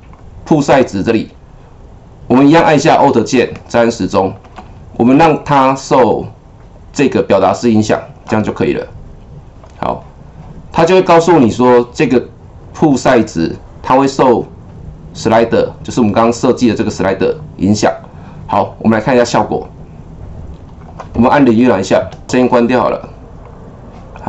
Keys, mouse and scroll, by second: 0.1 click, 3.5-10.7 alt+drag, 18.6 click, 19.6-22.0 drag, 22.0 KP_0, 22.2-23.4 drag.